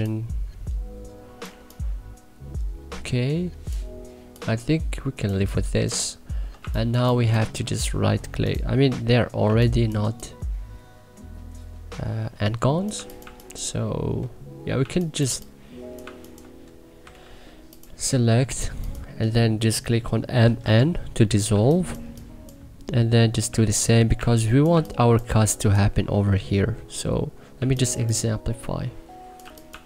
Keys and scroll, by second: 6.5 1, 6.9 3, 9.4 2, 9.9 3, 13.1 1, 15.2 3, 15.9 1, 17.0 c, 20.1-21.4 typing, 23.4 2, 24.1 1, 24.7 2, 27.5 1, 27.9 3, 29.6 1.